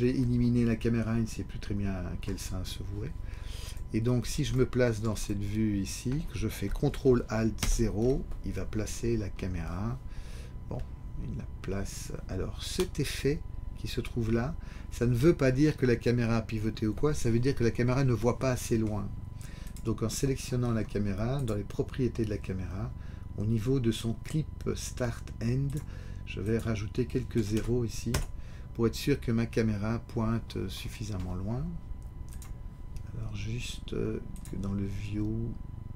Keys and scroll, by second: 7.6 ctrl+alt+0, 28.1 Return.